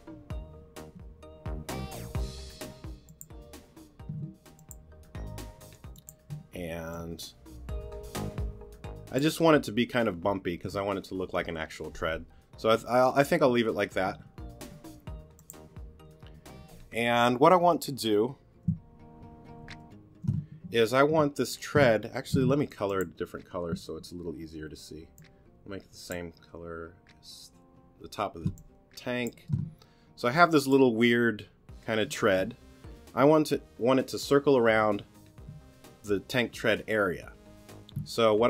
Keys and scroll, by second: 4.1 t, 6.3 t, 14.6 t, 19.6 super+g, 22.3 q, 28.4 space, 30.3 t.